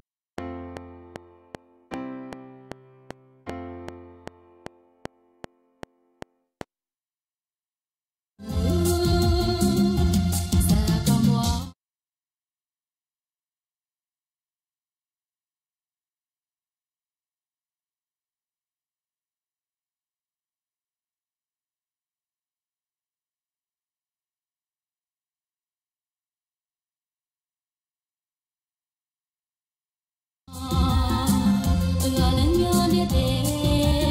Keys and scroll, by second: 6.7 space, 7.7 ctrl+shift+Left, 8.3 space, 11.4 space, 12.7 Right, 12.8 Left, 22.2 space, 23.1 alt+Tab, 30.4 space.